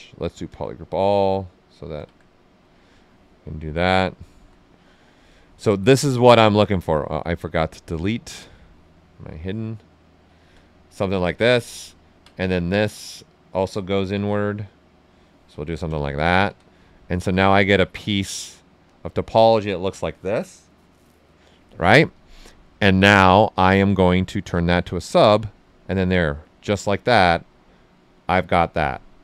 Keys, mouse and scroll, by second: 1.2-2.6 drag, 2.6 right click, 5.2 click, 6.0 ctrl+z, 7.5 shift+click, 8.3 click, 8.9 right click, 9.9 click, 11.0 right click, 11.9 ctrl+right click, 13.0-15.6 drag, 15.6 ctrl+right click, 16.4 d, 17.0 shift+f, 17.5 right click, 18.8 click, 20.1-22.1 right drag, 22.1-24.6 drag, 24.6 click, 25.5 ctrl+right click, 26.3 alt+right click, 27.3-29.2 right drag, 27.6 typing.